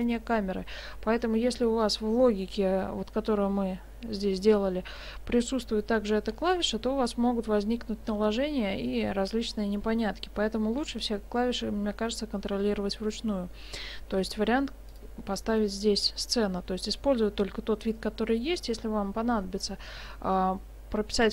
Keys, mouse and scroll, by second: 14.9 click.